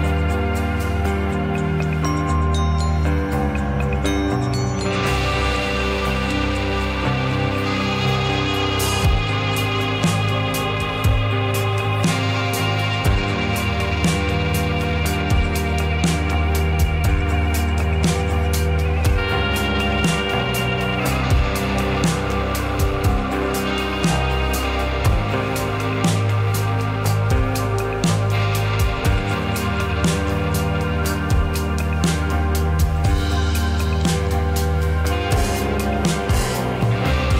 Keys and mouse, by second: 6.5 l, 7.7 click, 9.6 click, 11.2 click, 12.8 click, 14.6 middle click, 19.9 Tab, 21.2 click, 22.4-23.0 drag, 24.8 click, 25.8 l, 28.5-29.0 drag, 31.0 click, 31.6-34.0 drag, 34.7 click, 36.0-37.3 drag.